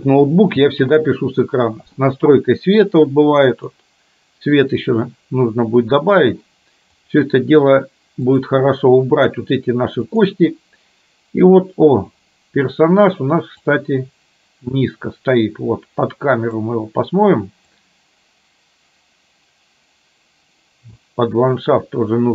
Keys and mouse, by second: 13.9-16.8 drag, 17.9-21.0 drag.